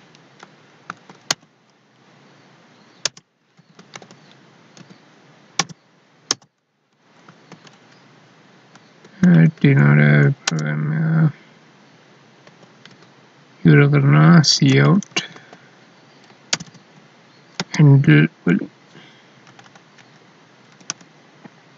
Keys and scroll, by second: 0.8 ctrl+s, 1.3 End, 7.2 ctrl+s, 9.2 Down, 12.4 Up, 17.6 space, 19.5 Left.